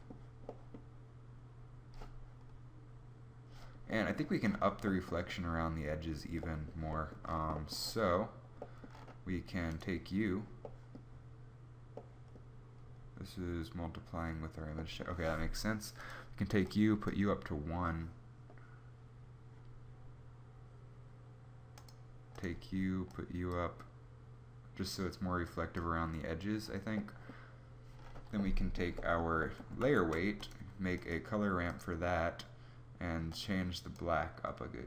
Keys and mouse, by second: 29.3 shift+a.